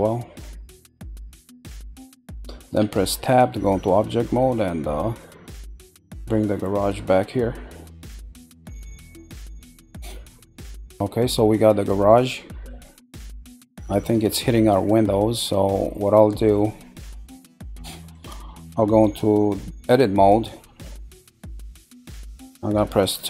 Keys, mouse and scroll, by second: 2.8 Tab, 5.0-6.1 scroll down 1, 6.1 click, 9.6-10.4 middle drag, 10.4-10.9 scroll, 10.9-11.9 middle drag, 12.7-13.9 middle drag, 14.5-16.3 shift+middle drag, 17.1-19.6 middle drag, 19.6 Tab, 21.1-22.7 middle drag, 22.7 2.